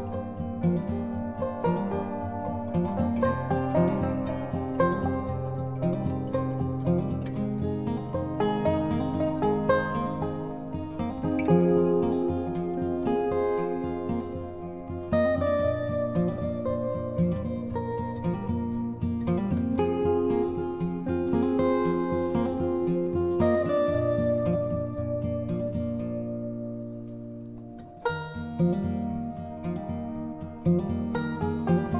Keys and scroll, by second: 11.3 ctrl+t.